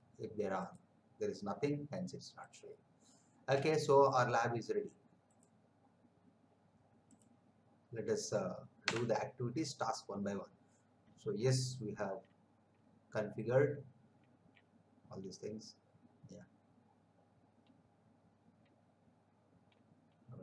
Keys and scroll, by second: 8.8 Escape.